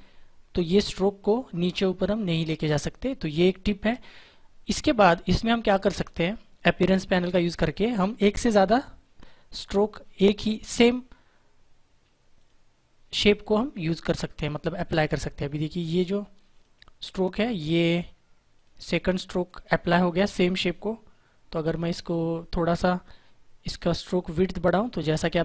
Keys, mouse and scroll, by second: 8.6 click, 12.3 click, 16.4 click.